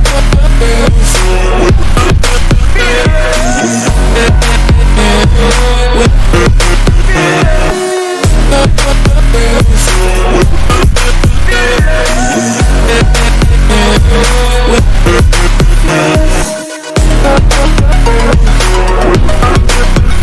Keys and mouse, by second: 0.0-1.4 typing, 1.5 Return, 3.1 right click, 3.7 click, 5.3 click, 6.6-8.5 typing, 9.1 click, 9.7 click, 10.5 click, 11.0 click, 11.5 click, 12.4 click, 13.8-14.6 typing, 15.4 Return, 15.6 ctrl+t, 16.4 click, 17.4 ctrl+t, 18.7 Return, 19.7 ctrl+t.